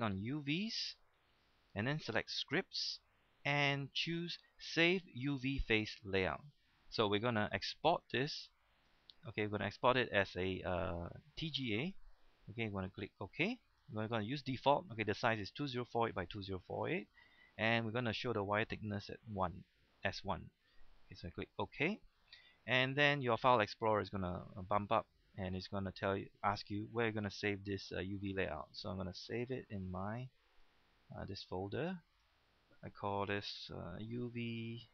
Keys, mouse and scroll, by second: 33.6 Right, 34.0 BackSpace.